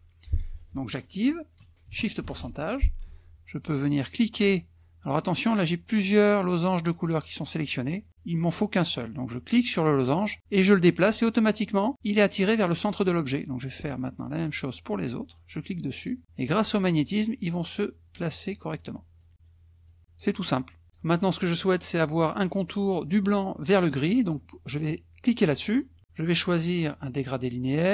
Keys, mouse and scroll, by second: 0.2 click, 7.6 click, 8.7 click, 10.0-13.2 drag, 13.7 click, 15.4 click, 16.4 click, 17.8 click, 19.2 click, 19.9 click, 20.8 click, 25.6 click.